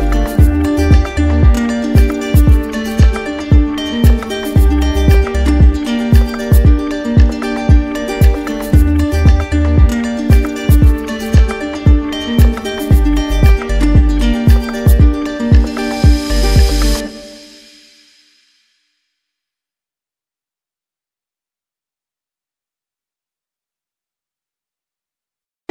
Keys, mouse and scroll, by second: 0.5 click, 1.0 click, 1.8 right click, 3.3 right click, 4.7 right click, 6.1 click, 6.9 right click, 7.5 alt+right click, 8.3 right click, 9.9 click, 11.1 click, 11.5 right click, 12.7 click, 13.1 click, 13.9 click, 14.9 click, 16.0 alt+click, 17.1 alt+right click, 17.2 alt+right click, 18.3 alt+right click, 18.8 alt+right click, 20.5 right click, 21.7 right click, 23.0 click, 23.6 alt+click, 24.4 alt+right click, 24.9 click.